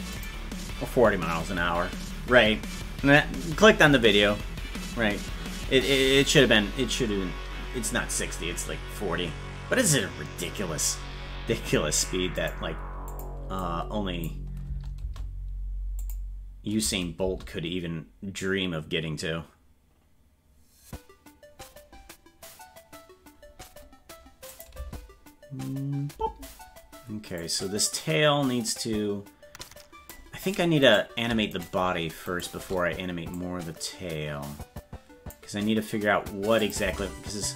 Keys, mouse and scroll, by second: 12.4 click, 13.1 click, 13.6 click, 14.6 space, 16.0 click, 16.8 space, 24.5 click, 24.7 space, 27.4-30.1 drag, 30.9 right click, 31.6 shift+right click, 32.3 shift+right click, 33.3-35.3 drag, 36.6 click, 36.8 space.